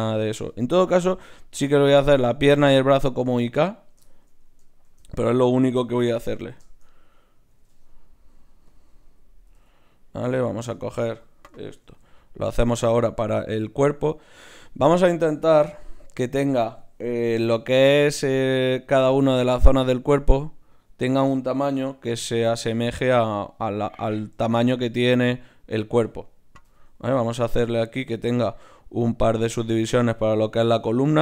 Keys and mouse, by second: 4.8 shift+a, 5.6-7.5 drag, 7.5 g, 9.5 g, 10.4 click, 11.8 ctrl+alt+s, 15.7 g, 18.8-21.3 right drag, 22.6-26.6 middle drag, 26.6 w.